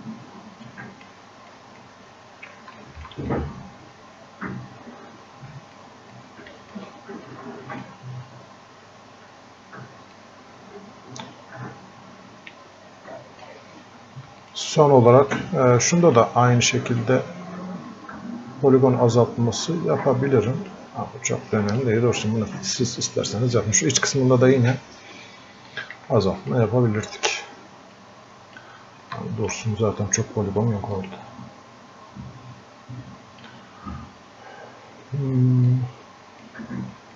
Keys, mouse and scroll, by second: 0.7 click, 1.5 click, 2.1-2.6 scroll up 1, 2.8 alt+click, 3.3-6.2 drag, 6.2 click, 7.3-10.1 drag, 10.2-14.5 drag, 15.3-17.1 drag, 17.1-21.8 drag, 21.8-25.7 drag, 25.7-28.0 drag, 28.0 click, 29.2-31.0 alt+drag, 31.0-35.7 drag, 35.7-37.1 drag.